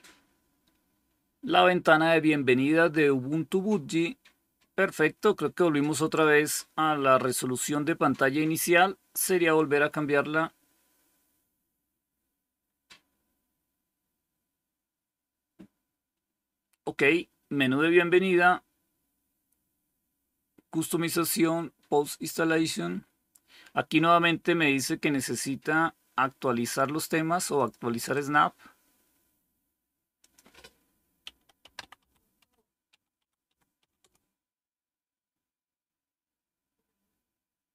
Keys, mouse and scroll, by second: 27.4 click, 28.2 click, 30.9-34.2 typing.